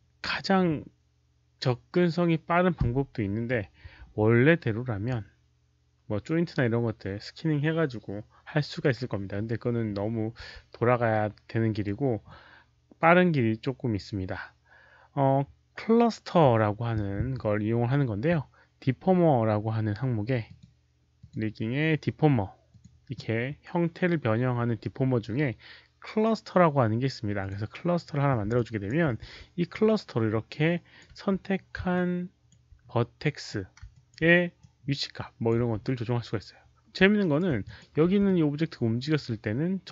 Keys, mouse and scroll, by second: 2.8 alt+click, 11.0 right click, 11.2 w, 12.2 click, 20.4 click, 21.1 click, 21.2 right click, 22.6 click, 27.3 click, 28.5 alt+click, 29.2 w, 29.6-30.9 alt+drag, 31.0 z, 31.8 alt+click, 33.6-36.0 typing, 33.8 alt+click, 34.5 alt+click, 37.1 alt+right click, 37.6 alt+click, 38.0 w, 38.2-39.8 middle drag, 39.5-39.9 typing, 39.8 alt+click, 39.8 alt+right click.